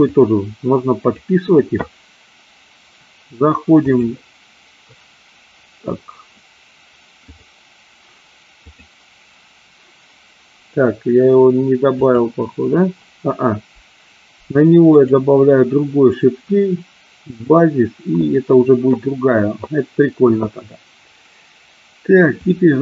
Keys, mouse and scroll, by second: 0.0-1.4 drag, 3.7-4.9 drag, 7.3 click, 11.9 click, 15.0 click, 17.4 click, 22.4-22.8 drag.